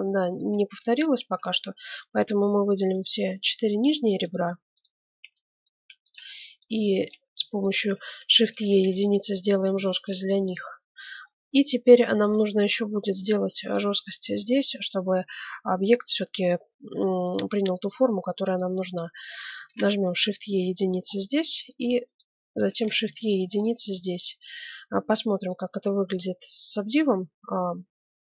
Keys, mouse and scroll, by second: 0.5 Tab, 2.1 right click, 3.3 middle click, 4.2-6.1 right drag, 6.1-8.4 middle drag, 8.4 shift+e, 8.7 right click, 8.9 click, 9.5 middle click, 13.4 middle click, 15.1-18.0 middle drag, 17.2-19.0 drag, 18.6 middle click, 19.0-20.8 right drag, 19.6 shift+e, 21.1 middle click, 22.0-23.7 right drag, 22.7 shift+e, 23.7 middle click, 24.5 Tab, 25.4 click, 26.0-27.3 middle drag.